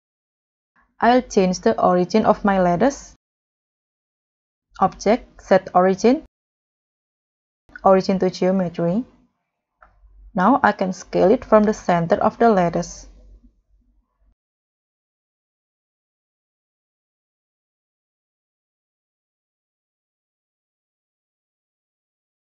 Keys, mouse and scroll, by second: 0.2 g, 0.2 z, 0.6 s, 1.6 Escape, 10.2 s, 14.6 scroll down 2, 15.2 scroll down 1, 15.2-16.1 scroll up 4, 16.5 scroll up 1, 16.5 scroll down 2, 16.8 middle click, 17.4-18.5 scroll up 1, 20.0 middle click, 20.0-20.6 scroll down 7, 20.6-21.4 scroll up 6, 22.0 scroll up 1, 22.2 right click.